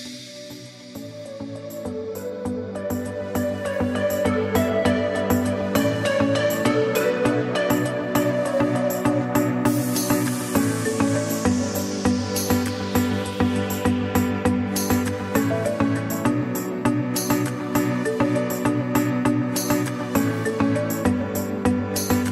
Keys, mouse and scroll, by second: 1.7 click, 4.2 click, 5.2 ctrl+z, 7.2 click, 13.3 click, 15.7 click.